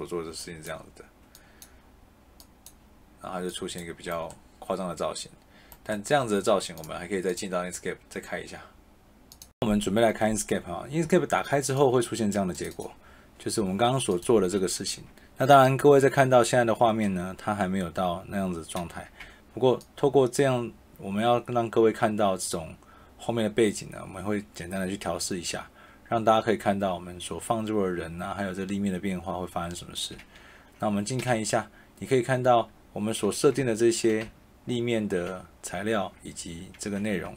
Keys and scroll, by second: 15.4 shift+a, 16.0 shift+a, 19.1 d, 31.2 q, 33.5 a, 34.0 s, 34.2 a, 37.1 a.